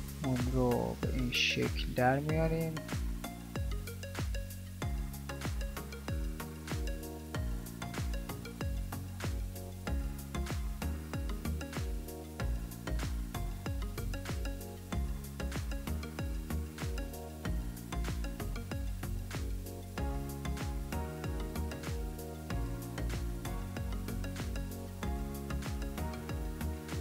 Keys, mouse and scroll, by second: 15.1 s.